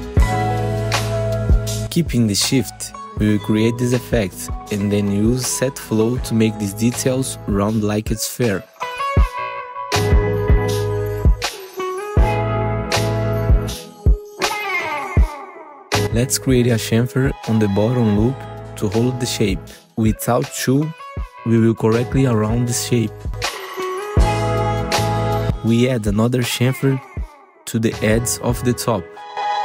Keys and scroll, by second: 0.7 w, 2.5 r, 4.7 w, 5.6 r, 6.5 w, 7.5 r, 8.7 w, 11.0 F4, 11.0 r, 11.2 F3, 12.8 F3, 13.2 1, 13.4 F4, 13.8 w, 16.6 2, 17.5 ctrl+shift+c, 21.0 alt+2, 23.1 alt+2, 23.4 F4, 24.6 F4, 27.0 ctrl+shift+c.